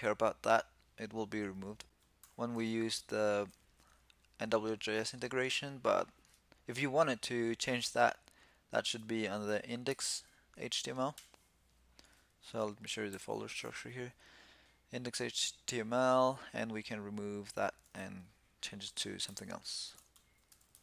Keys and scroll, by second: 1.9 super+p, 12.8 shift+super+e.